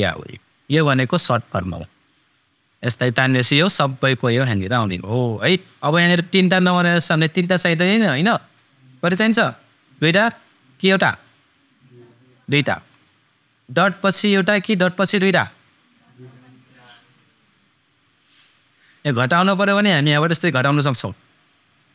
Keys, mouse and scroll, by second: 2.4-7.3 super+drag, 20.0 super+click.